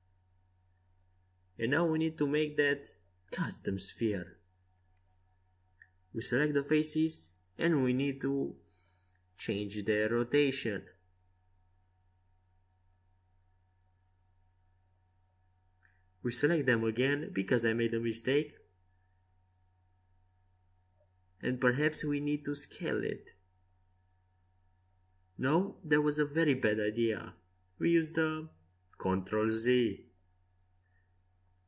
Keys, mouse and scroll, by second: 0.0 c, 12.4-14.2 right drag, 14.2 c, 24.6 s, 28.5 Escape, 29.9 ctrl+z, 31.4 a.